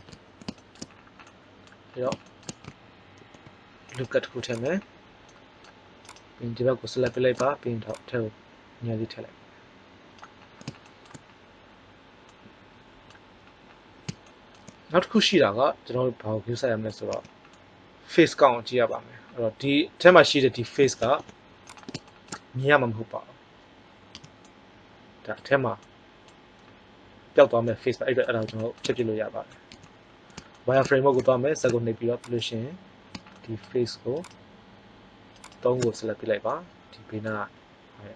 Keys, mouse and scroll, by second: 0.0-1.2 middle drag, 3.1 ctrl+r, 5.9 right click, 10.4-11.4 middle drag, 15.4-16.7 middle drag, 17.0 z, 21.0 ctrl+Tab, 24.1 z, 29.6 z, 33.3 right click, 33.5 right click.